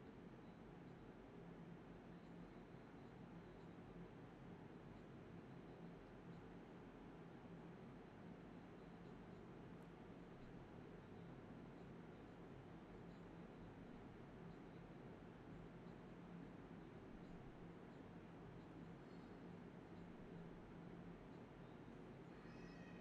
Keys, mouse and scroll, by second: 0.4 shift+click, 0.8 alt+click, 2.1 alt+click, 2.2 alt+double click, 2.3 alt+click, 3.2 shift+click, 3.3 shift+double click, 3.4 shift+click, 3.8 alt+click, 4.1 alt+click, 4.7 ctrl+b, 5.5 typing, 6.2 double click, 7.0 typing, 7.2 double click, 7.8 shift+click, 7.8 shift+double click, 7.9 shift+click, 8.3 alt+click, 9.9 alt+click, 10.5 shift+click, 11.3 alt+click, 12.5 alt+double click, 12.6 alt+click, 13.0 shift+click, 14.5-15.9 typing, 18.5 typing, 19.8 alt+click, 20.1 ctrl+z, 20.6-23.0 typing, 21.5 alt+click, 21.7 alt+click, 22.5 alt+click.